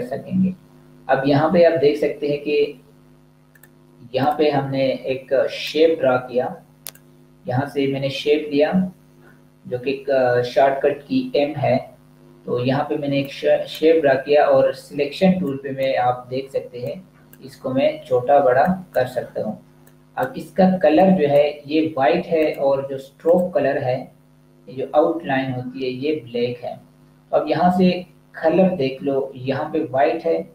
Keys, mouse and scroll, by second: 3.3 click, 13.2 click.